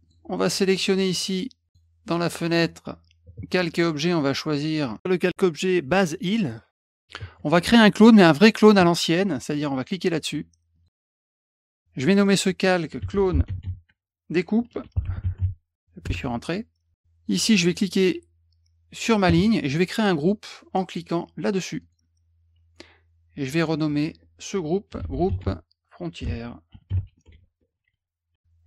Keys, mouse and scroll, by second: 0.0 click, 0.9 click, 1.6 click, 10.7 click, 12.0 click, 12.1 click, 12.7-15.8 typing, 17.6 click, 21.8 click, 23.5 click, 23.7 click, 24.6-28.3 typing.